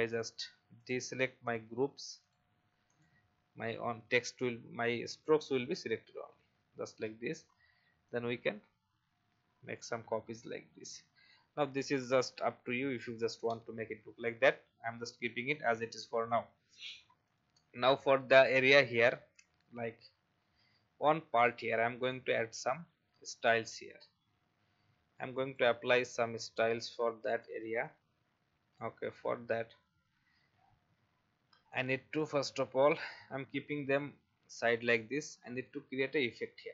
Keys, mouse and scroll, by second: 0.2 shift+click, 1.4 shift+click, 2.2 shift+click, 2.8 shift+click, 4.8 click, 6.3 ctrl+z, 8.1-9.8 alt+drag, 13.4 Delete, 15.5 click, 21.9 space, 22.1-29.0 drag, 29.3 alt+scroll down 1, 30.5-31.7 scroll down 1, 31.7-34.0 drag, 35.4-36.6 scroll up 1.